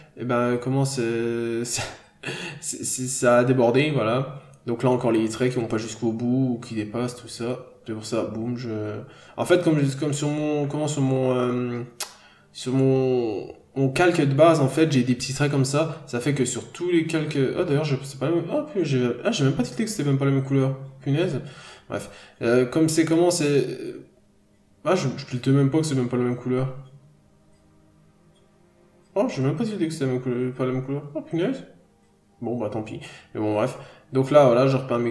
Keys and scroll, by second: 0.4 ctrl+z, 1.1 scroll down 1, 2.0 p, 3.7 scroll up 1, 4.1 n, 4.2-5.0 scroll up 1, 6.8 b, 10.1 ctrl+z, 10.4 p, 11.1 ctrl+d, 11.3 f, 12.6 ctrl+z, 16.1 b, 17.2 ctrl+z, 19.2 scroll down 1, 19.4 n, 19.5 scroll up 1, 20.1 scroll up 1, 21.0 b, 21.6 ctrl+z, 22.8 ctrl+z, 23.7 ctrl+z, 24.6 ctrl+z, 25.1 ctrl+z, 25.7 scroll down 1, 26.0 scroll up 1, 26.2 b, 27.0 scroll down 1, 27.6 scroll up 1, 28.1 p, 28.8 scroll down 1, 29.1 n, 29.2-29.9 scroll up 1, 30.4 scroll up 1, 31.2 b, 31.9 scroll down 1, 32.5 n, 32.7-33.0 scroll down 1.